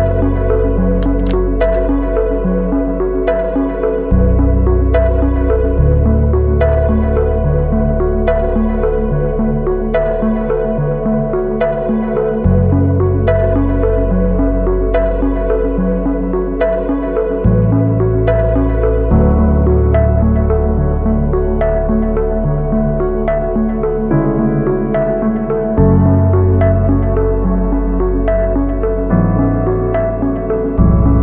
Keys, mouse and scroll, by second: 2.3-6.1 scroll down 1, 7.6-8.4 typing, 9.5 typing.